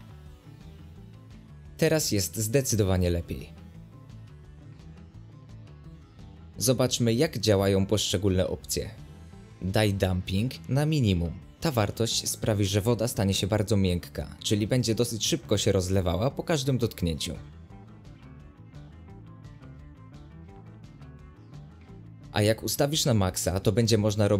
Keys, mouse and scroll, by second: 0.1 click, 1.1 right click, 1.3 scroll down 1, 2.1-3.5 middle drag, 3.5 click, 3.8 space, 4.2 g, 7.9-8.6 right drag, 8.6 click, 9.1 scroll down 1, 9.7 middle click, 10.0 space, 10.4 click, 11.3 click, 13.8-16.6 middle drag, 16.6 space, 17.1 click, 21.4 space, 21.9 click, 24.2 middle click.